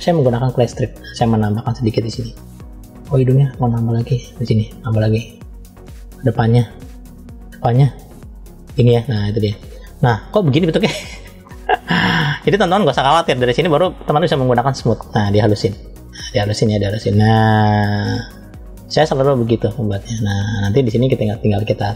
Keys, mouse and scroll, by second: 0.4 click, 1.2 middle click, 2.2-3.0 scroll up 1, 3.0 click, 4.0 click, 4.4 click, 5.7 click, 6.6 click, 7.0 click, 7.2 click, 8.1 click, 9.1 click, 10.2-10.9 scroll down 2, 10.9 middle click, 11.7-12.0 scroll up 1, 12.2 middle click, 14.4 click, 15.7 click, 20.5 middle click, 21.0-21.3 scroll up 1, 21.3 click.